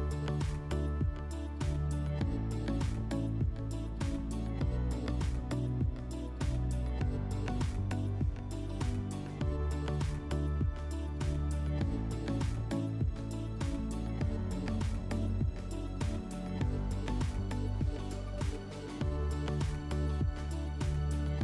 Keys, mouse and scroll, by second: 0.2 click, 1.0 click, 2.8 click, 4.2 click, 5.1 click, 7.0 click, 9.1 click, 9.5 middle click, 10.4 click, 11.3 alt+w, 12.3 click, 14.7 click, 15.6 click, 17.2 click, 18.1 click, 18.9 middle click.